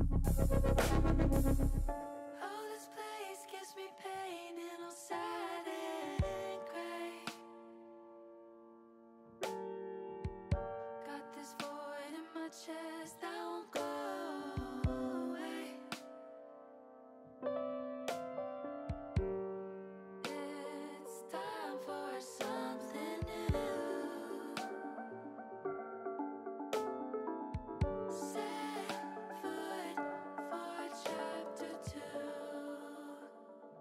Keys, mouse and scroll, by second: 0.4 click, 2.2 click, 3.2 middle click, 4.4 middle click, 5.5 shift+a, 9.3 s, 12.9 click, 13.6 click, 14.9 middle click, 16.2 middle click, 19.7 click, 21.0 click, 21.6 click, 24.1 click, 24.9 ctrl+z, 25.9 click, 26.6 click, 28.0 click, 29.0 ctrl+z, 32.4 middle click, 33.6 e.